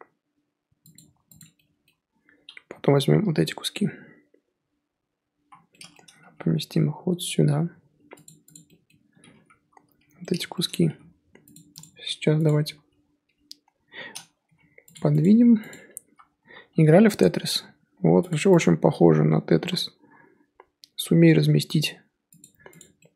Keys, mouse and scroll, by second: 1.4 Left, 3.2-5.4 l, 6.2 g, 8.5 Left, 9.5 l, 9.8 l, 10.8 g, 12.4 click, 13.2 l, 13.6 l, 14.4 g, 15.2 click, 15.7 click, 16.0 l, 16.4 l, 16.7 g, 18.6 click, 19.1 l, 19.5 l, 20.1 g, 22.8 click.